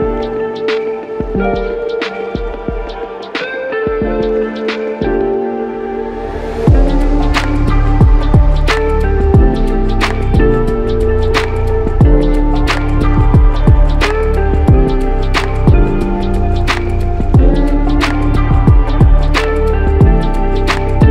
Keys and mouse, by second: 1.2 alt+l, 1.6 ctrl+z, 7.3 alt+click, 17.7 ctrl+click, 18.6 ctrl+i.